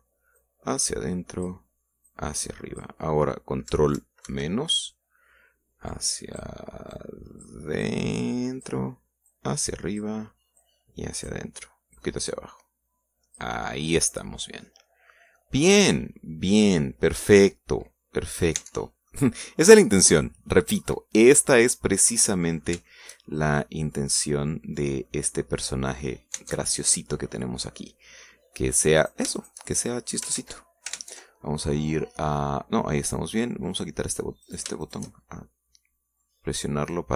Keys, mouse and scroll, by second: 1.4-2.7 drag, 3.1 click, 5.3 ctrl+KP_Subtract, 7.0 click, 8.0 click, 8.9-9.9 drag, 10.3 click, 11.7 click, 13.0-14.6 drag, 15.0 scroll down 1, 15.2-16.9 middle drag, 18.2 scroll down 1, 18.5-19.6 middle drag, 19.6 Tab, 19.8 scroll down 1, 20.2-21.7 middle drag, 21.8-22.1 scroll up 1, 22.4 middle click, 23.5 scroll down 1, 23.9 shift+middle click, 24.4 shift+middle click, 25.6 scroll down 2, 26.1-27.2 middle drag, 27.4 Tab, 28.8 middle click, 30.0 right click, 30.4 shift+middle click, 31.4 ctrl+shift+z, 32.1 ctrl+Tab, 34.8 click, 35.5 right click, 35.7 shift+middle click, 36.2-37.1 shift+middle drag.